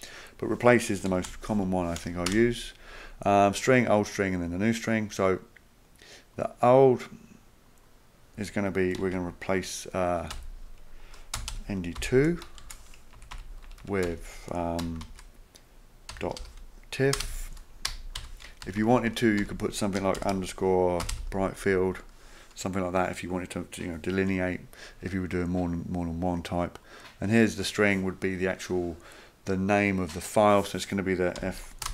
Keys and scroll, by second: 0.8-1.6 typing, 2.3 Return, 8.8-12.6 typing, 13.2 Right, 13.3 Right, 13.7 Delete, 13.8 Delete, 14.1 Delete, 14.8-18.7 typing, 18.8 Left, 18.9 Left, 19.1 Left, 19.4 Left, 19.9-21.6 typing, 31.1-31.9 typing.